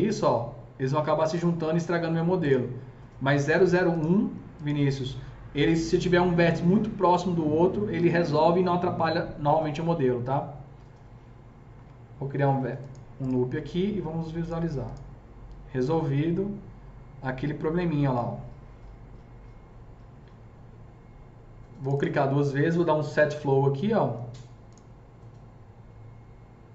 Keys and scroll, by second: 11.8 KP_0.